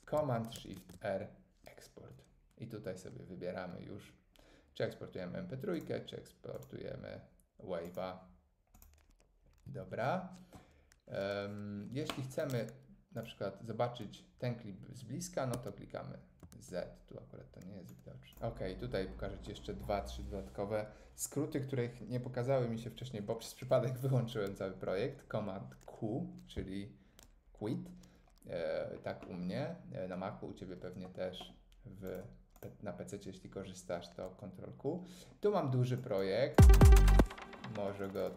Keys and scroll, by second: 0.2 Escape, 0.8 shift+super+r, 9.7 Escape, 15.5 z.